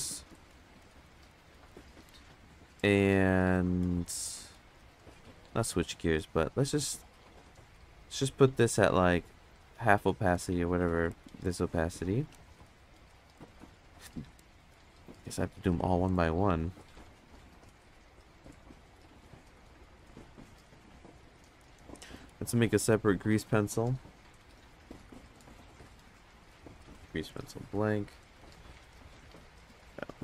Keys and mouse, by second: 0.1 click, 0.5 click, 0.8 click, 1.1 click, 1.3 click, 1.9 click, 3.0 click, 3.6 click, 3.8 click, 4.1 drag, 4.5 click, 4.7 click, 5.0 click, 5.3 click, 6.2-9.6 drag, 10.4 ctrl+click, 11.4 click, 12.1 ctrl+click, 12.6 click, 13.4-14.4 drag, 14.7-16.1 drag, 17.0 click, 17.6-19.9 drag, 21.6 click, 23.9-24.4 drag, 25.3 shift+a.